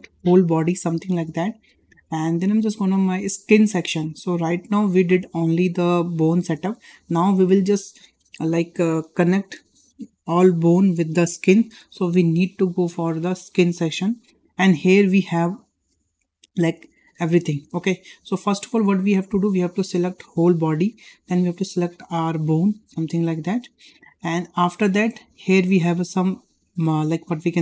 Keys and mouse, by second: 13.3 click, 22.2 shift+click, 22.8 shift+click.